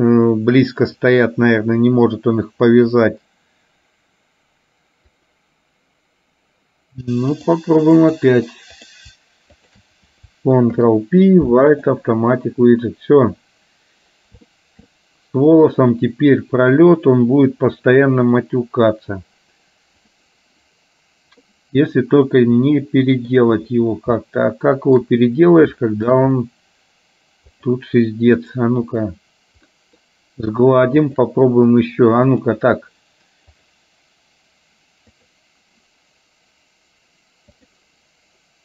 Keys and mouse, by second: 0.9-5.5 drag, 7.5 click, 9.8 shift+click, 10.8 ctrl+p, 14.5 shift+middle click, 16.9 click, 21.5-23.4 middle drag, 24.3 shift+middle click, 26.0 shift+middle click, 27.6 click, 28.5 right click, 29.8 middle click, 31.0 shift+click, 32.4 click, 35.3 click, 37.8 click.